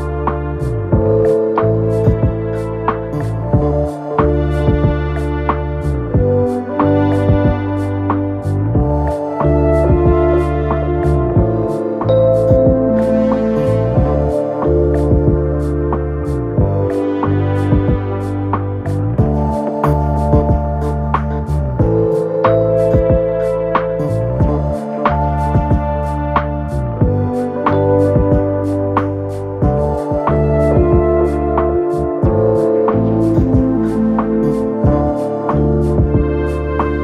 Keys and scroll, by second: 22.0 Return.